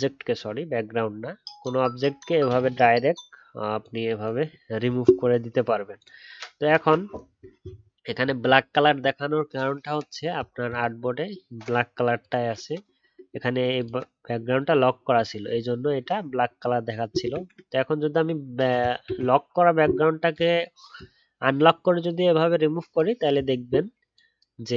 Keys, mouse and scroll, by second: 8.1-8.7 alt+scroll down 1, 8.7-10.0 alt+scroll up 1, 19.0 ctrl+z.